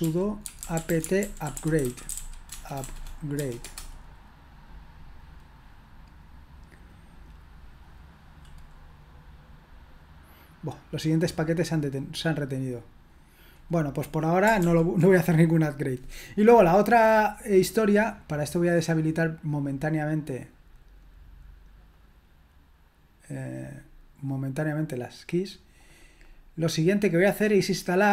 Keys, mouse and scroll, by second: 0.0-3.6 typing, 3.6 Return, 14.6 ctrl+l, 19.3-24.3 drag.